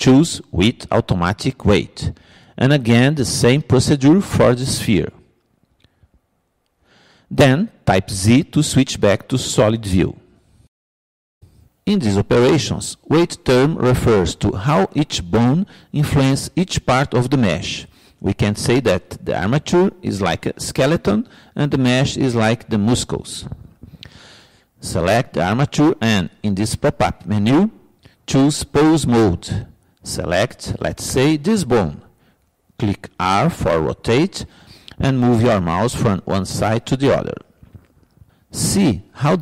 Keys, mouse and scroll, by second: 4.6-6.5 drag, 6.7-8.7 drag, 8.7 ctrl+p, 11.1 z, 28.4-30.4 drag, 32.7-34.4 drag, 34.5 r.